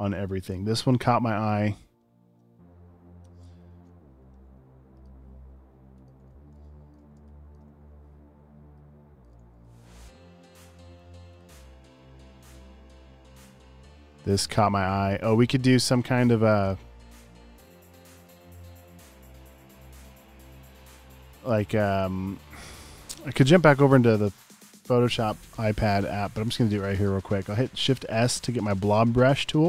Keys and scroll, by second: 6.3 super+v, 7.2 space, 11.2-12.0 typing, 17.5 space, 27.9 shift+b.